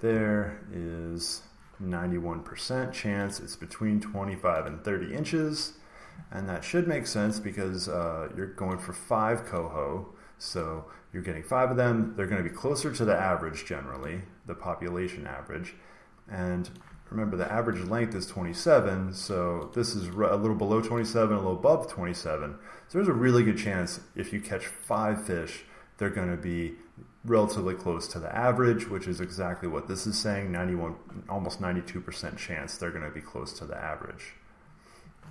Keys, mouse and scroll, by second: 0.8-1.3 scroll down 2, 3.2 click, 4.6 click, 8.6-10.5 drag, 16.6 click, 17.7 click, 19.2 click, 19.7 click, 20.1 click, 21.0 click, 24.9 click, 29.2 click, 34.1-35.3 middle drag.